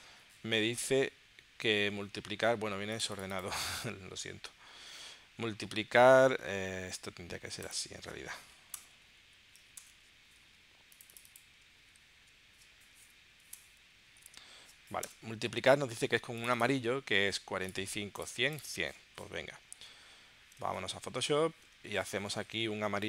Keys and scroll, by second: 19.7 super+Tab, 20.6 super+Tab.